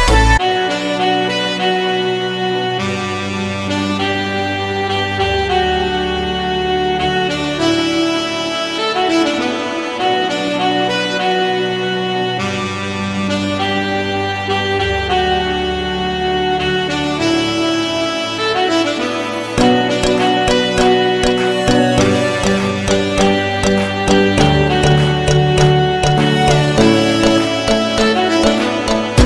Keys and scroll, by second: 8.3 c, 20.3 shift+F2, 20.6 F3, 27.0 F3.